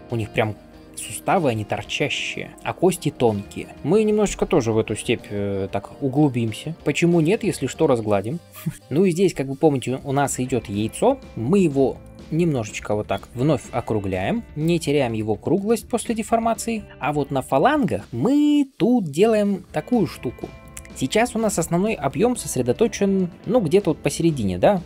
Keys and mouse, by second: 0.0-24.8 shift+drag, 19.4-22.6 middle drag, 22.6-23.8 d.